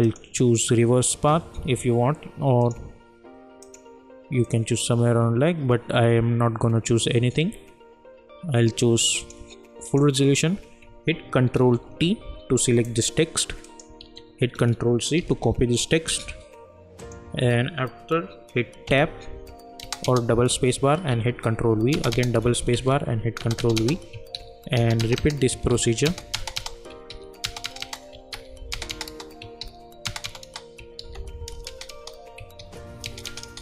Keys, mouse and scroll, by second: 0.0 click, 6.4 click, 9.2 click, 11.7 ctrl+t, 13.6 click, 14.0 ctrl+a, 15.2 ctrl+c, 17.0 click, 18.8 Tab, 19.8 space, 21.1 ctrl+v, 21.9 space, 22.7 ctrl+v, 23.4 space, 24.3 ctrl+v, 24.8 space, 25.7 ctrl+v, 26.0 space, 27.1 ctrl+v, 27.4 space, 28.3 ctrl+v, 28.7 space, 29.6 v, 30.0 space, 31.0 ctrl+v, 31.7 space, 32.5 ctrl+v, 33.0 space.